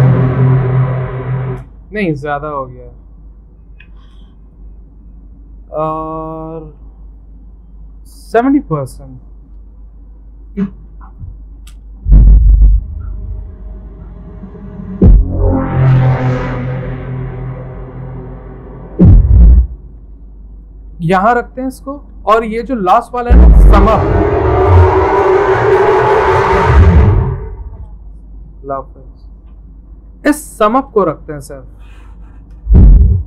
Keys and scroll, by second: 2.9 ctrl+z, 4.1 ctrl+z, 8.1-9.0 typing, 20.0 c, 21.9-22.6 typing, 31.7 c.